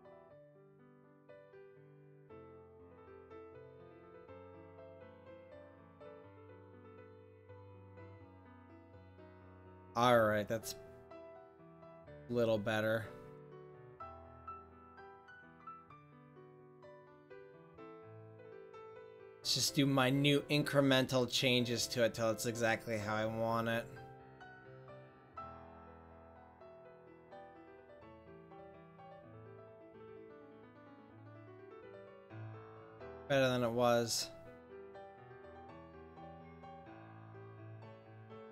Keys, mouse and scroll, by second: 2.2-5.2 middle drag, 5.2 click, 7.4-8.4 middle drag, 9.1-10.7 middle drag, 13.9-18.4 drag, 18.1 middle click, 18.1 right click, 19.2 click, 19.4 middle click, 22.3-23.5 drag, 22.4-23.8 middle drag, 28.0-29.2 drag, 30.5-31.1 drag, 31.1-32.1 middle drag, 33.9-35.2 middle drag, 35.2 right click, 35.9 click, 36.5 middle click.